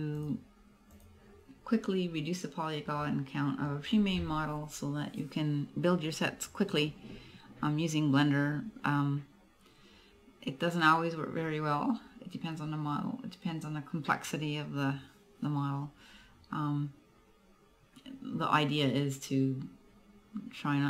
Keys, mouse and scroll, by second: 2.1-3.2 scroll down 1, 3.2 middle click.